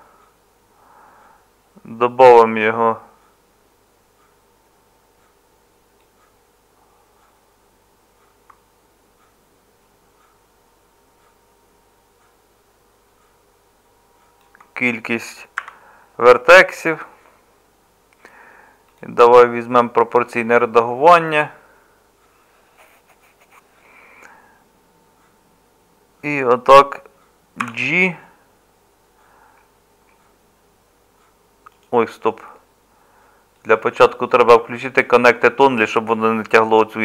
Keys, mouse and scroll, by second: 15.6 1, 27.6 g.